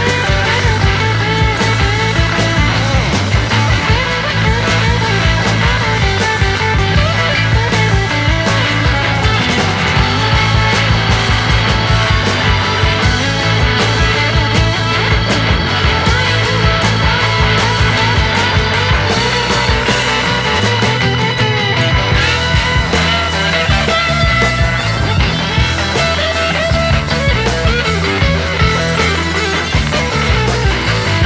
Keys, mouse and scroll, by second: 11.3 alt+right click, 11.5 alt+right click, 12.7 alt+right click.